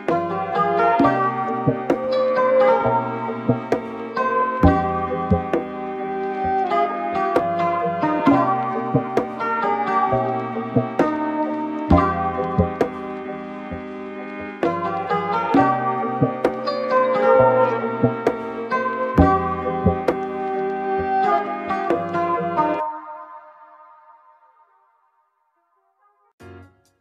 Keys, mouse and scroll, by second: 0.1-2.3 shift+middle drag, 2.3 click, 3.1-4.4 drag, 7.1-7.6 shift+middle drag, 7.6 click, 9.4-13.7 drag, 16.1-20.4 drag, 21.4 click, 22.2-25.7 middle drag, 25.7 click, 26.3-27.0 drag.